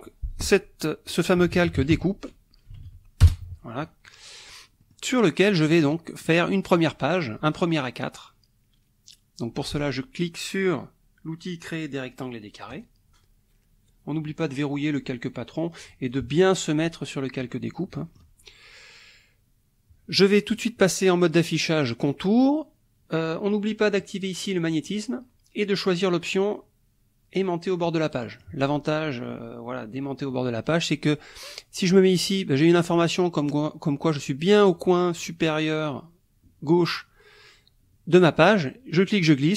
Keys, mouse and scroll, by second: 1.1-3.3 typing, 4.8 click, 5.5 click, 6.3 click, 12.7 click, 16.1 click, 16.6 click, 17.8 middle click, 20.6 click, 22.0 click, 24.1 click, 24.8 click, 28.1 click, 38.4-39.5 drag.